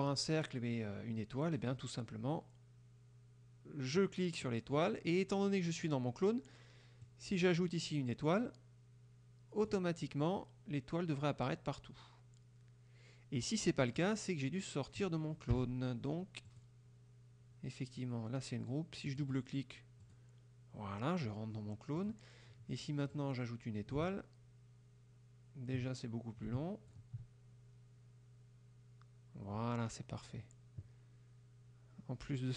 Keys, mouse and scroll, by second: 4.1 click, 7.1-10.0 drag, 14.1 click, 15.6 Delete, 16.6 click, 19.1 click, 20.1 click, 22.1 click, 23.2-27.2 drag.